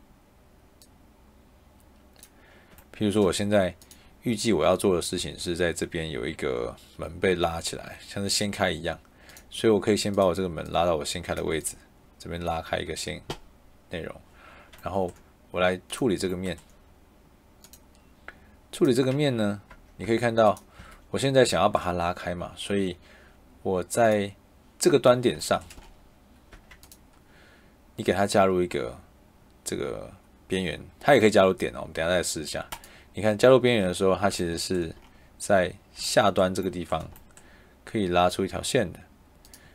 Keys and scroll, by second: 5.1 Escape, 11.4 Escape, 19.6 Tab, 20.7 Escape, 26.4 Tab.